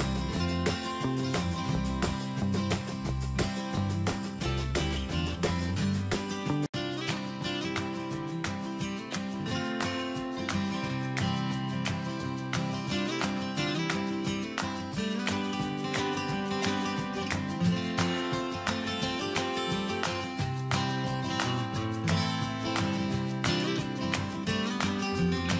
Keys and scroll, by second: 0.8 ctrl+Return, 1.7 ctrl+a, 4.9 ctrl+space.